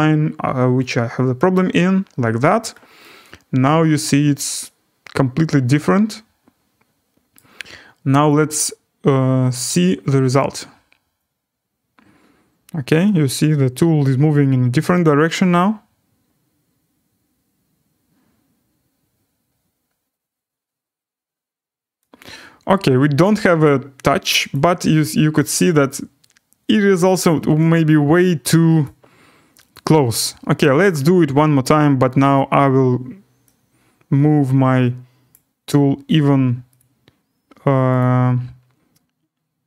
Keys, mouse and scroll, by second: 1.5 click, 2.4-3.8 drag, 3.8 click, 4.2 middle click, 5.1 click, 5.6 click, 6.0 click, 6.2 click, 7.3 middle click, 8.2 click, 10.3 click, 19.4 middle drag, 19.7 scroll, 23.2 right click, 24.5 click, 27.7 click, 28.8 click, 29.7 click, 30.9 click, 31.5 scroll, 35.3 click, 36.8 click, 38.0 click.